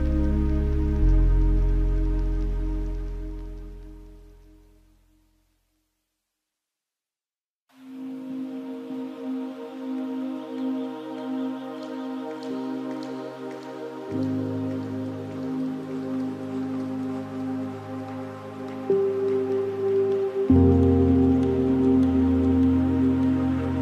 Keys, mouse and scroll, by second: 0.4-6.7 drag, 6.7 ctrl+z, 7.5-12.3 drag, 12.3-14.5 middle drag, 14.5-19.8 drag, 19.8-22.1 middle drag, 22.1-23.2 drag, 23.2-23.6 scroll down 4, 23.6-23.8 middle drag.